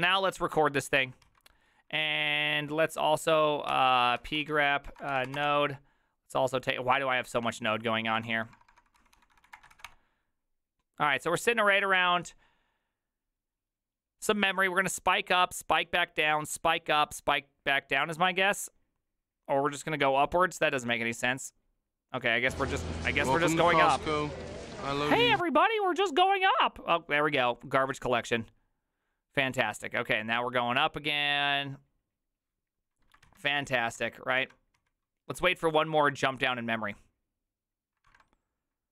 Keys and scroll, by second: 1.3 alt+{, 2.0 ctrl+a, 3.4-5.8 typing, 7.0-9.9 typing, 34.0 alt+{, 34.0 alt+[, 34.8 alt+{.